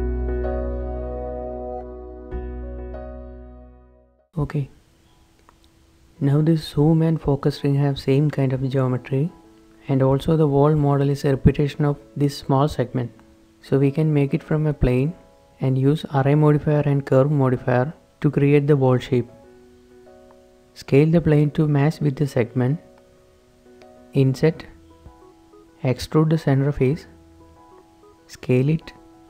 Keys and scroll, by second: 1.9 shift+x, 4.4 shift+h, 16.4 shift+a, 18.1 Tab, 19.0 s, 19.3 Tab, 19.3 a, 19.3 s, 19.3 g, 20.6-22.6 typing, 24.1 shift+i, 24.5 s, 25.9-27.9 typing, 28.9 ctrl+s, 28.9 ctrl+shift+z.